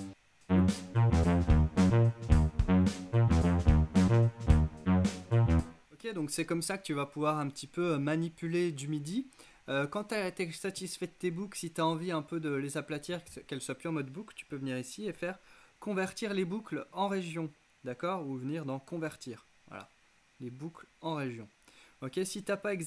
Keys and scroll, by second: 5.5 space.